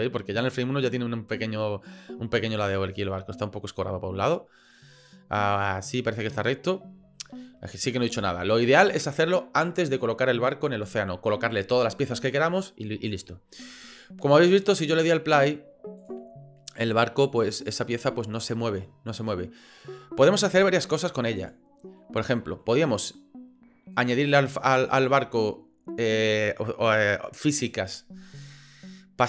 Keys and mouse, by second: 7.1 shift+click, 7.6 click, 8.3-8.7 shift+drag, 14.2 click, 14.6 click, 16.0 click, 19.2 right click, 20.6 click, 21.5 click, 22.0-22.6 middle drag, 23.9 right click.